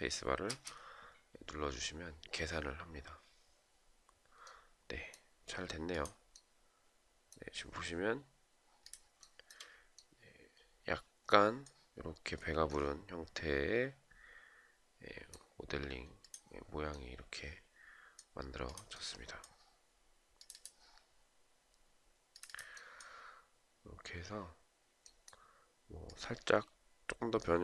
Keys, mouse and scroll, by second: 0.0 space, 8.7 shift+right click.